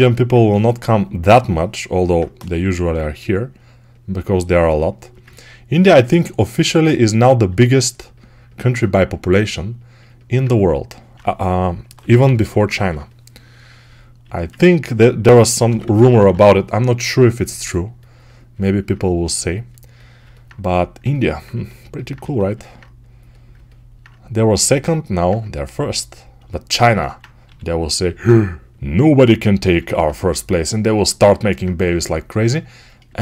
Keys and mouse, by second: 0.2 2, 2.4 g, 7.4 right click, 9.9-32.8 alt+right drag, 11.7 m, 12.1 [, 12.2 [, 14.1 a, 15.1 g, 15.5 ], 15.7 ], 22.1 a, 27.3 g, 31.6 2.